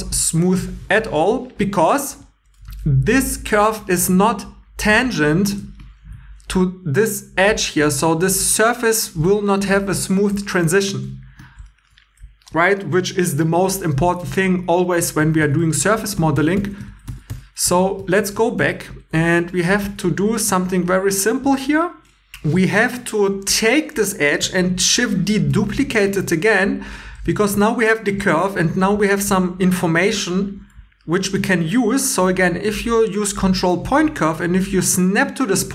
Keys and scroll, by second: 5.5 shift+e, 8.4 3, 15.2 super+z, 15.4 super+z, 15.6 super+z, 19.2-20.3 typing, 25.5 shift+d, 27.1 1.